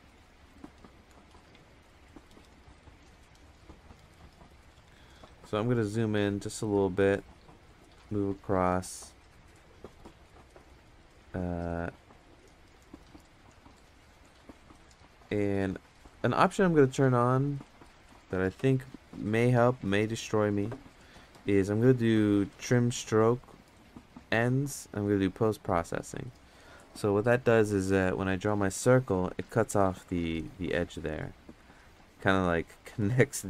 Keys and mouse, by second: 2.7 click, 4.0 right click, 4.6 ctrl+z, 5.7 KP_Add, 5.8 KP_Add, 7.0 click, 12.2 click, 14.7 ctrl+z, 16.6-19.1 drag, 19.9 middle click, 21.1-25.8 drag, 28.4 click, 30.1 ctrl+z, 30.4 click, 31.6 ctrl+z, 31.8 click, 32.9 ctrl+z, 33.0 click.